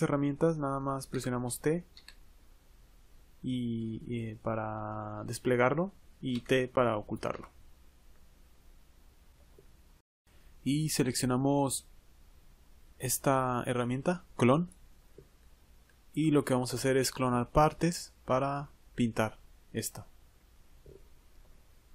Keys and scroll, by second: 1.9 t.